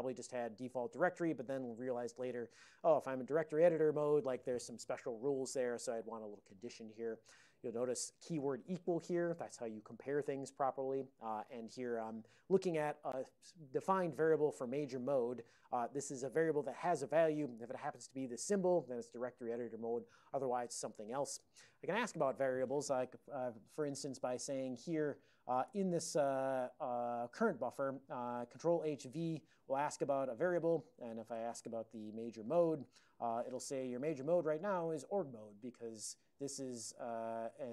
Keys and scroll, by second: 25.8 ctrl+h, 31.0-32.2 typing, 32.9 Return.